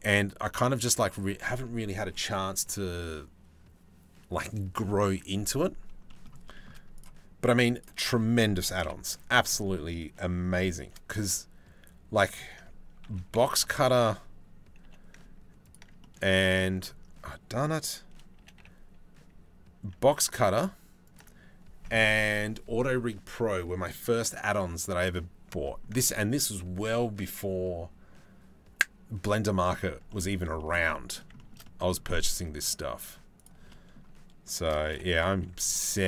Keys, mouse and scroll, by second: 0.0 click, 0.1 click, 5.7 middle click, 6.1 shift+middle click, 7.3 shift+click, 8.4 KP_7, 10.4 shift+d, 12.7 r, 14.5 g, 15.6 click, 16.9 click, 18.0 g, 25.3 click, 25.4-29.9 middle drag, 30.2 shift+middle click, 31.0 shift+middle click, 31.2 middle click, 32.0 middle click, 33.0-34.1 shift+middle drag, 34.2 shift+d.